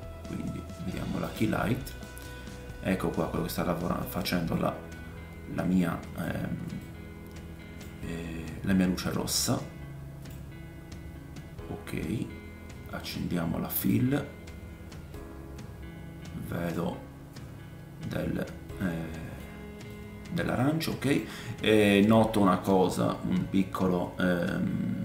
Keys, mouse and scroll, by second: 1.3 middle click, 1.3 right click, 2.0 middle click, 4.5 middle click, 6.8 middle click, 9.1 middle click, 13.8 click, 15.1 middle click, 18.7-25.0 drag, 20.2 middle click, 21.0 middle click, 22.1 middle click.